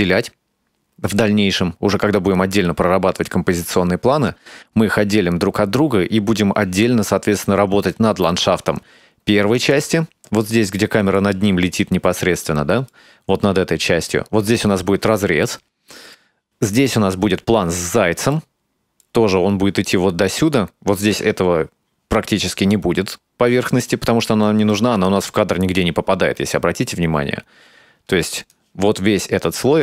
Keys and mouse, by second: 8.1 space, 9.6 click, 10.8-11.2 middle drag, 12.5-13.0 middle drag, 15.5-16.2 shift+middle drag, 18.4-19.1 middle drag, 25.1-28.6 drag, 29.5 click.